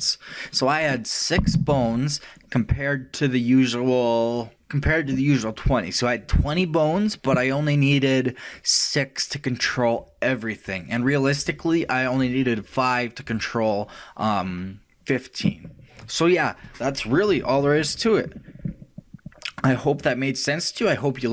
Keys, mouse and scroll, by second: 20.1-21.3 middle drag.